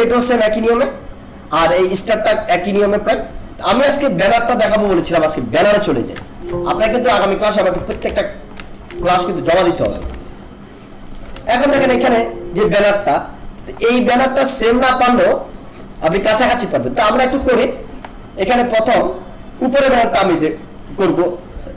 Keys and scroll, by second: 6.3 alt+space, 7.9 ctrl+=, 8.7 alt+space, 9.8 ctrl+-.